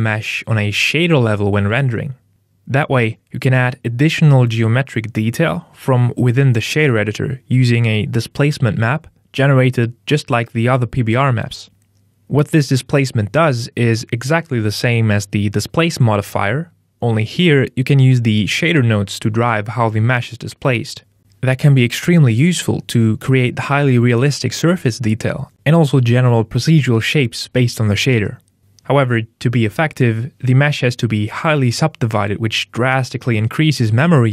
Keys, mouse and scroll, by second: 2.8 KP_Enter, 9.9 middle click, 10.4-10.8 scroll down 1, 11.6 ctrl+shift+click, 15.5 middle click, 17.2 ctrl+shift+click, 19.0-19.6 scroll down 15, 19.8 middle click, 25.5 middle click, 26.3 ctrl+middle click, 27.2 middle click, 29.0 right click, 31.8 click.